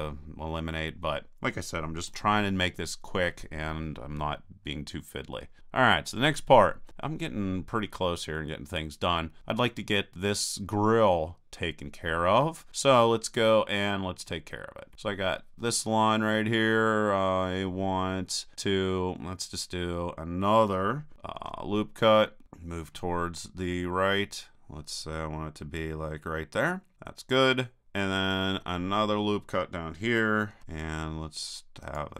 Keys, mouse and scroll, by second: 2.1 KP_1, 4.6-11.0 middle drag, 21.4 ctrl+r, 27.8-29.5 drag, 30.5 ctrl+r.